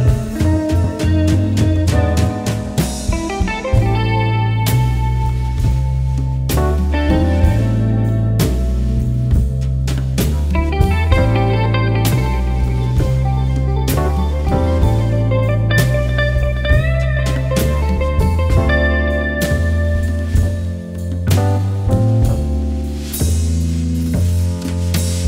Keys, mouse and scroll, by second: 1.1-4.5 drag, 4.5 ctrl+i, 8.2-11.1 typing, 10.6 click, 11.3 click, 12.7-13.3 typing, 13.4 click, 15.3-16.0 typing, 16.1 click, 17.1-18.2 typing, 18.3 click.